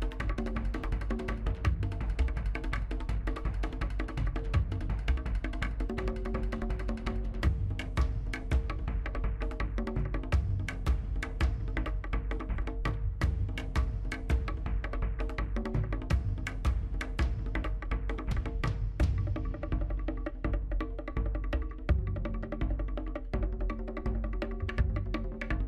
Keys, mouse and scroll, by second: 0.0 middle click, 0.3-0.7 scroll up 3, 0.4 shift+middle click, 0.7 shift+middle click, 0.9 shift+click, 2.1 middle click, 2.4 click, 2.6 scroll down 1, 2.7 shift+middle click, 3.2 scroll up 2, 3.4 middle click, 3.7 click, 3.7 middle click, 3.9 click, 4.3 middle click, 5.0 scroll down 1, 5.0 middle click, 5.6 click, 5.7 middle click, 5.9 shift+click, 6.2 g, 6.6 middle click, 6.8-9.2 drag, 9.2 scroll down 1, 9.3 middle click, 9.8 click, 10.0 shift+click, 10.2 middle click, 10.3-11.4 right drag, 11.4 scroll down 2, 11.4 middle click, 11.6-11.9 scroll up 3, 11.6 shift+middle click, 11.9 middle click, 12.1 middle click, 12.3 click, 12.9 middle click, 13.0 click, 13.3 scroll down 2, 13.4 shift+middle click, 13.6 click, 13.9 middle click, 14.2 click, 14.3 middle click, 14.7 scroll down 3, 14.7 middle click, 14.9 shift+middle click, 15.1 scroll up 2, 15.3 scroll down 1, 15.3 shift+middle click, 15.4 middle click, 15.7 middle click, 15.8 KP_1, 16.0 scroll down 2, 16.2 shift+middle click, 16.5-16.8 scroll up 1, 16.8 shift+z, 16.9 scroll down 1, 17.0-17.4 scroll up 2, 17.1 shift+middle click, 17.4-18.3 scroll down 3, 17.5 shift+middle click, 17.7 Tab, 17.8 click, 19.4-20.1 scroll down 3, 21.2 scroll up 11, 21.5 shift+middle click, 21.8-22.3 scroll down 1, 22.3 r, 23.5 scroll down 1, 23.7-24.1 shift+middle drag, 24.1-24.6 scroll up 2, 24.2 shift+middle click, 24.4 shift+z, 24.6 middle drag, 24.6 scroll down 1, 24.7-25.1 shift+middle drag, 25.1 scroll up 1, 25.1-25.5 shift+middle drag, 25.5 s.